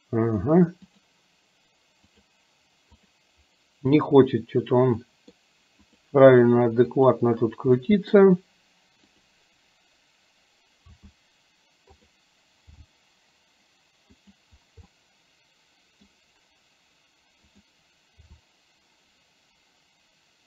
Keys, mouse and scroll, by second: 3.1 click, 4.1 click, 5.2 middle click, 5.9 click, 7.1 click, 7.8 middle click, 9.2 click, 10.9 r, 12.8 g, 14.9-16.2 middle drag, 17.7 click, 18.3 r.